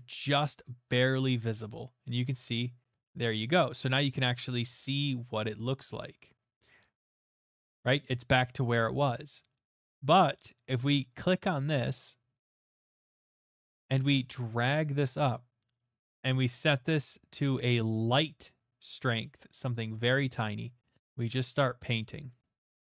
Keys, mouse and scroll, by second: 0.0 click, 0.6 click, 4.8 middle click, 5.2 click, 7.2 middle click, 7.5 middle click, 7.5 middle click, 8.0 middle click, 8.1 middle click, 9.9 middle click, 11.2 click, 15.0 click, 16.7-17.5 scroll, 18.6-19.7 scroll, 20.0 middle click, 20.0 click, 20.6 click, 21.4 click, 21.8 click, 22.3 middle click, 22.6 click.